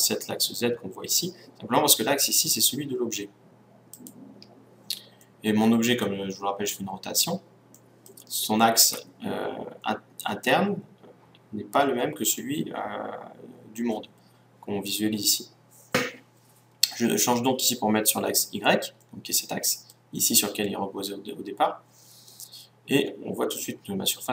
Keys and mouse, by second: 1.9-3.9 drag, 5.0-14.3 middle drag, 19.0-21.3 middle drag, 22.2-24.3 middle drag.